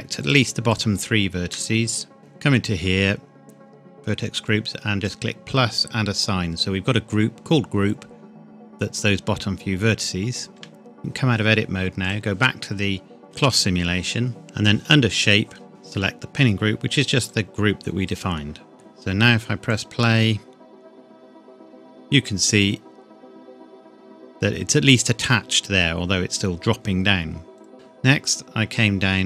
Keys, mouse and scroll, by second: 0.2 shift+click, 5.0 click, 10.5 Tab, 12.0 click, 15.7 click, 18.7-19.6 scroll down 1, 19.6 click, 21.2 scroll down 1, 21.3 scroll up 1, 23.6-24.3 scroll down 1, 27.6 click, 27.7-28.7 scroll down 1.